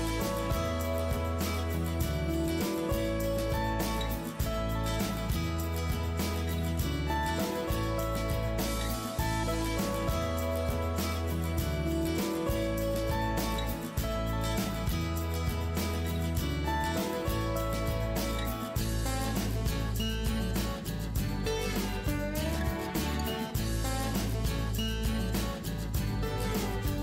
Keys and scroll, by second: 1.4 Return, 3.6 Return, 12.2 Return, 15.0 Return, 19.5 Return, 20.3 Delete, 22.7 Return, 24.7 Return.